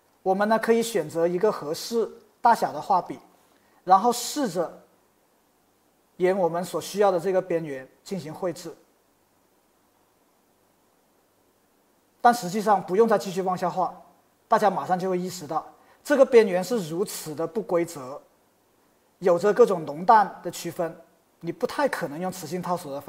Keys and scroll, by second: 0.0-0.8 typing, 16.9 Escape.